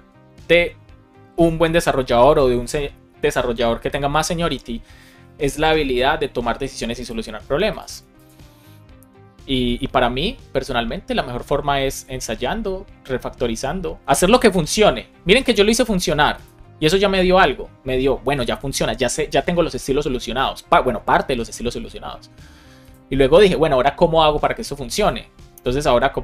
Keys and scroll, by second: 25.5 Return.